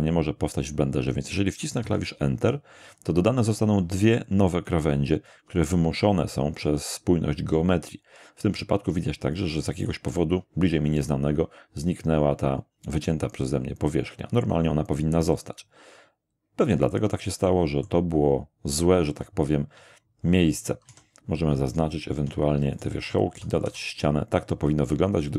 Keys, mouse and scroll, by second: 1.8 Return, 6.6-11.2 middle drag, 15.3-17.3 middle drag, 17.5 middle click, 20.9 a, 21.5 alt+shift+a, 21.7 alt+shift+right click, 22.7 alt+shift+right click, 23.3 alt+shift+f, 23.6 alt+shift+a.